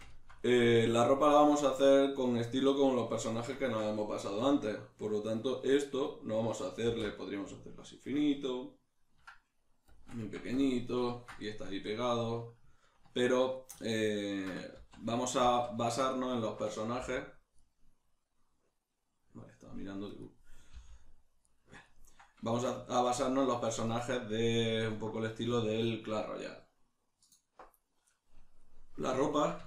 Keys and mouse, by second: 6.9 alt+e, 10.0 shift+click, 10.2 Tab, 10.7-17.8 ctrl+middle drag, 14.8 ctrl+z, 17.0 g, 17.8 right click, 20.2 click, 20.8 g, 21.6 right click, 21.8 ctrl+middle click, 28.6 middle click.